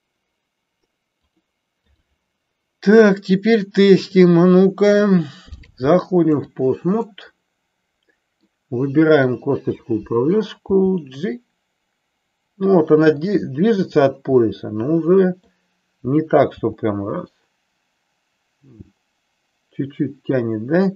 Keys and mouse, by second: 1.2-2.2 drag, 3.9 click, 5.6-6.6 drag, 7.2-8.6 middle drag, 9.3 click, 10.7 g, 14.4-15.5 middle drag, 16.5 g.